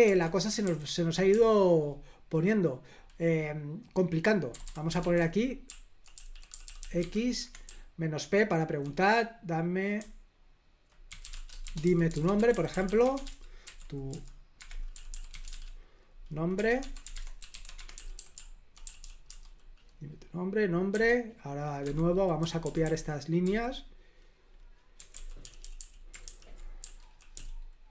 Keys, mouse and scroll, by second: 0.0 Escape, 0.6 super+l, 1.3 k, 4.5-8.8 typing, 7.3 Escape, 9.9-19.7 typing, 20.9 o, 21.8 Escape, 22.4-23.4 typing, 24.9-27.9 typing.